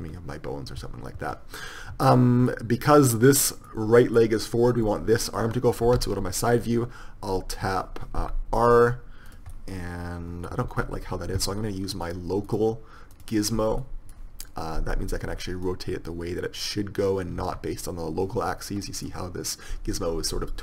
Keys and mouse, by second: 6.4 KP_3, 8.4 r, 10.9 ctrl+z, 15.9-17.6 drag, 17.6 ctrl+z.